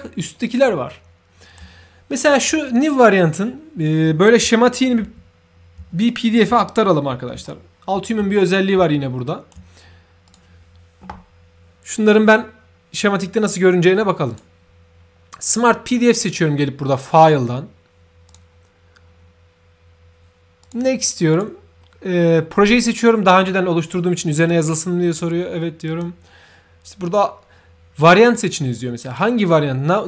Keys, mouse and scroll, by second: 2.7 shift+click, 5.0 ctrl+f, 6.0-6.4 right drag, 6.1 f, 7.4 ctrl+shift+right click, 8.8 shift+right click, 10.2 shift+click, 20.6 shift+click, 24.3 shift+click, 25.8 shift+click, 29.1 shift+click.